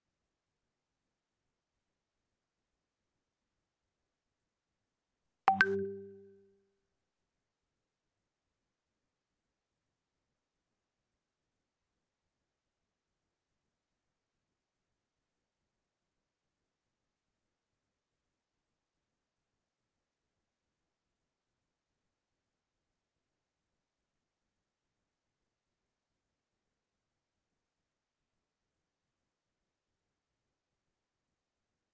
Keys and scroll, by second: 22.9 ctrl+Delete.